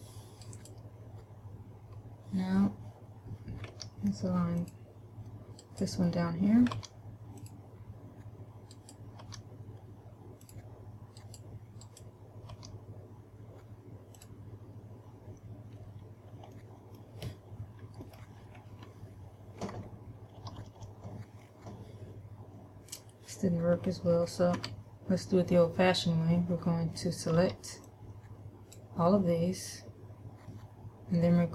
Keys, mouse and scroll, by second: 0.7 right click, 4.1 w, 6.0 right click, 7.1 w, 9.1 right click, 9.5 w, 11.4 right click, 12.1 right click, 12.8 w, 16.1 scroll up 1, 16.8 middle click, 18.1 scroll up 1, 18.4 middle click, 19.0 scroll up 1, 19.1-19.5 scroll down 1, 20.1 KP_Subtract, 20.7 KP_Add, 20.9 KP_Add, 21.1 KP_Add, 24.9 a, 27.6 b.